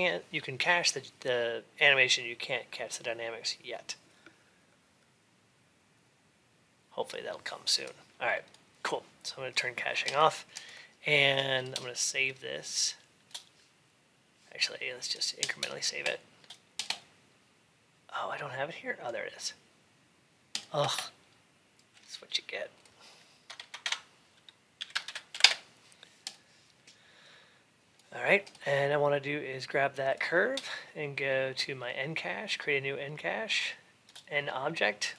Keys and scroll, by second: 23.3 BackSpace, 25.2 Return.